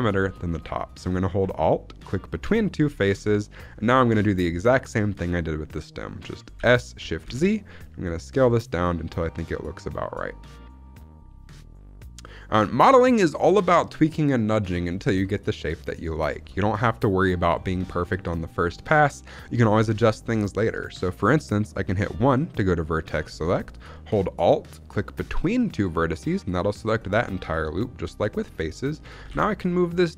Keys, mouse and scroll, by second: 0.3 scroll up 1, 2.2 alt+click, 3.6-5.2 scroll down 2, 5.2-6.5 scroll up 1, 6.5 s, 7.2 shift+z, 13.0 click, 15.1 shift+middle click, 16.0 scroll up 2, 16.4 shift+middle click, 17.2 shift+middle click, 17.5-18.4 scroll down 5, 17.8 shift+middle click, 18.6-19.4 scroll up 2, 20.1 shift+middle click, 21.8 1, 25.6 alt+click, 29.1 g.